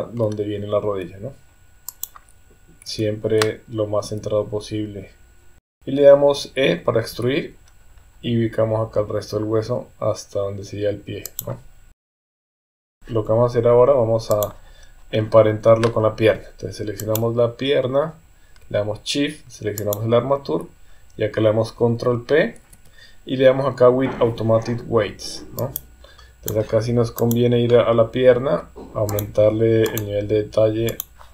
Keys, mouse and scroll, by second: 0.8 g, 2.8 KP_1, 4.0 g, 5.7 KP_3, 7.1 e, 11.9 KP_1, 12.4 g, 12.5 KP_3, 12.6 Tab, 12.9 click, 14.3 click, 17.0 click, 19.8 shift+click, 22.6 ctrl+p, 26.2 click, 27.2 click, 29.2 click, 30.9 click.